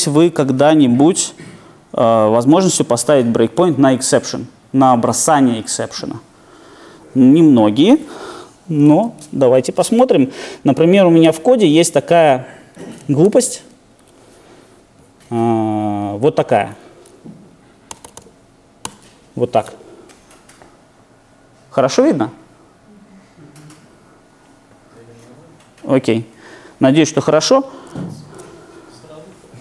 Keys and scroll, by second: 9.0 super+1, 11.2 super+e, 17.9 super+/, 28.2 shift+super+F9.